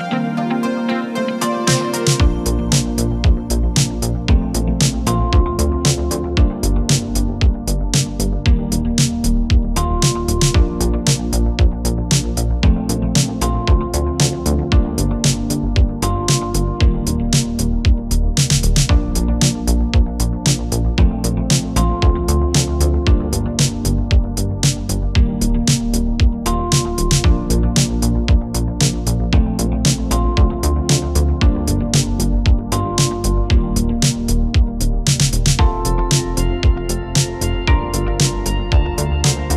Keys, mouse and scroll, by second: 0.8-1.7 typing, 3.4-4.2 click, 4.1 space, 6.9 space, 7.1-8.1 drag, 8.6 right click, 9.6-13.7 drag, 15.0 right click, 16.0 click, 18.8-20.3 typing, 19.4 Return, 20.8 click, 23.5-24.2 typing, 23.7 right click, 24.6 click, 26.6-27.3 typing, 28.3 typing, 28.5-31.0 drag, 32.6 space.